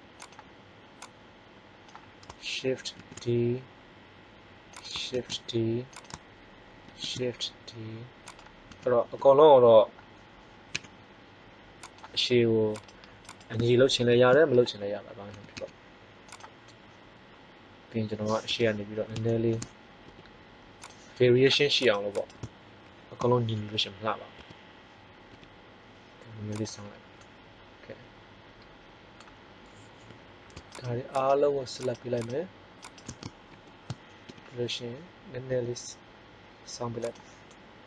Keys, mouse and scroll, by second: 2.9 shift+d, 4.8 click, 5.1 shift+d, 6.8 shift+d, 8.6 s, 11.9 click, 12.6-13.8 right drag, 13.8 ctrl+l, 15.2 s, 18.5 KP_1, 20.0 r, 20.7 click, 21.8 click, 21.8 right click, 23.1 ctrl+l, 24.3 KP_1, 25.2 r, 26.5 click, 33.4 ctrl+l, 34.2 KP_3, 35.4 r, 37.1 middle click.